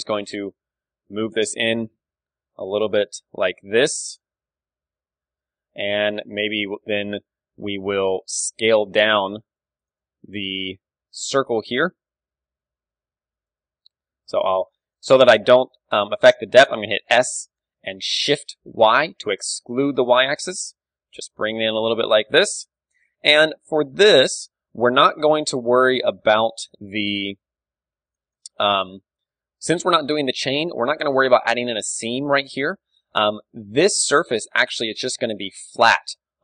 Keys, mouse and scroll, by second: 4.2-5.2 drag, 4.5 Tab, 4.7 KP_3, 5.2 middle click, 5.6 click, 5.6 KP_1, 5.9-8.1 middle drag, 6.9 Tab, 8.3 a, 8.7-10.9 right drag, 8.9 z, 10.2-12.9 middle drag, 11.0 KP_3, 11.7 KP_3, 13.4-15.1 middle drag, 13.8 KP_1, 14.2 z, 15.7 s, 16.5 click, 17.3-19.1 middle drag, 18.3 s, 21.9 click, 22.0 KP_3, 22.8 middle click, 23.2 a, 23.4 Tab, 24.0 middle click, 24.2 Tab, 24.7 z, 26.0 b, 26.8-27.9 right drag, 26.8 s, 28.4 Tab, 28.4-30.8 drag, 28.4 z, 28.7 KP_1, 30.8 middle click, 31.1 KP_3, 33.8-35.8 middle drag, 33.8 d, 35.8 click.